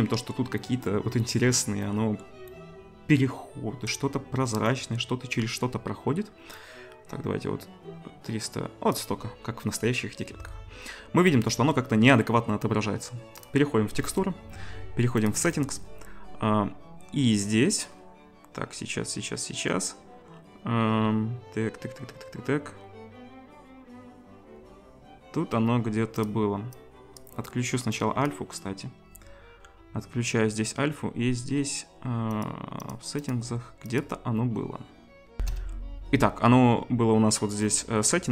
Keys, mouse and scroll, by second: 4.8-26.7 middle drag, 6.7-13.4 drag, 15.2-26.2 drag, 32.4 click, 32.9 click, 33.3 click, 34.0-35.3 drag, 35.3 ctrl+shift+F1.